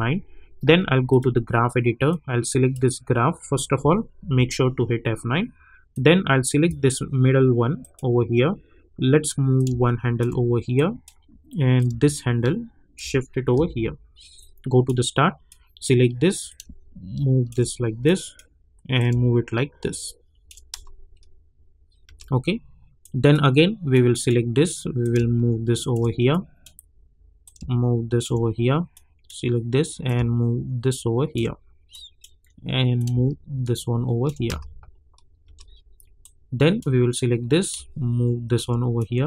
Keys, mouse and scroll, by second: 1.1-4.2 drag, 4.2 F9, 5.9-13.5 drag, 13.5 =, 14.7-15.4 drag, 15.8 click, 16.8 shift+click, 20.7 space, 23.0-26.3 drag, 24.5 click, 26.3-28.9 drag, 28.9-34.6 drag, 34.4 click, 34.6 space, 36.2-38.9 drag, 38.9 click.